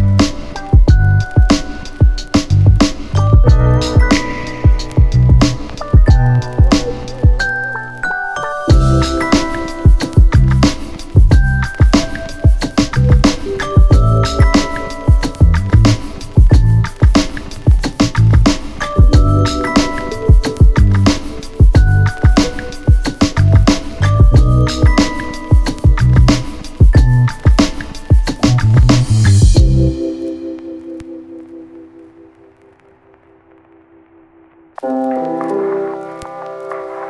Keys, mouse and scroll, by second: 0.7 click, 3.4 click, 5.0 click, 6.5 Return, 8.0 click, 9.8 Return, 11.3 click, 20.0 click, 21.7 click, 23.4 click, 24.7 Return, 28.7 click, 32.5 click, 35.4 click, 36.6 Return.